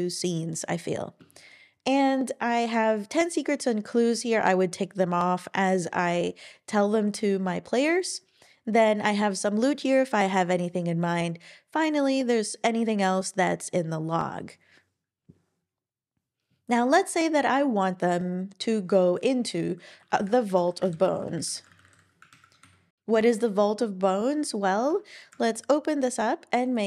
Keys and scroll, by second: 20.5 typing, 21.9 typing, 22.3 super+Right, 22.6 Escape.